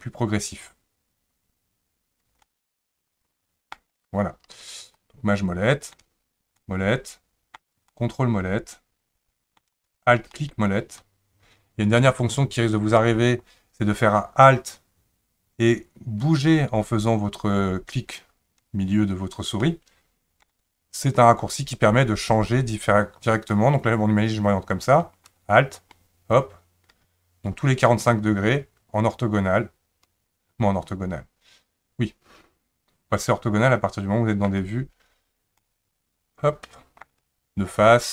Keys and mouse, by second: 2.5-3.7 ctrl+middle drag, 5.0-6.0 shift+middle drag, 6.6-7.6 middle drag, 7.9-9.6 ctrl+middle drag, 10.3 alt+middle click, 19.6 alt+middle click, 23.5-34.5 middle drag, 35.6-37.0 middle drag.